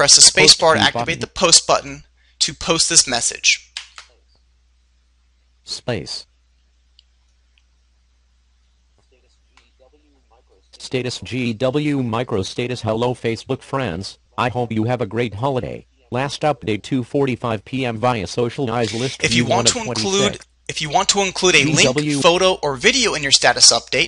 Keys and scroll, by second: 2.9 space.